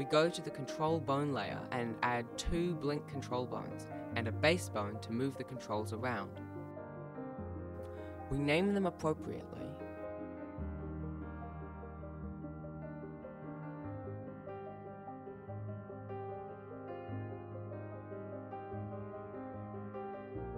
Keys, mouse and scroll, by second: 2.6 shift+a, 4.4 ctrl+KP_Add, 6.2 g, 8.3 r, 8.7 right click, 8.9 right click, 9.0 shift+middle click, 9.1 e, 9.5 scroll up 1, 9.7 shift+middle click, 9.9 right click, 10.1 click, 10.3 click, 10.3 scroll up 6, 10.4 click, 11.7 right click, 12.0 right click, 12.0 g, 12.2 right click, 12.4 click, 13.8 click, 14.2 ctrl+s, 14.4 scroll down 3, 14.5 scroll up 2, 14.7 scroll down 1, 14.9 ctrl+s, 15.0 shift+middle click, 15.1 scroll up 1, 15.2 shift+d, 17.0 ctrl+s, 17.2 click, 17.4 BackSpace, 17.8 BackSpace.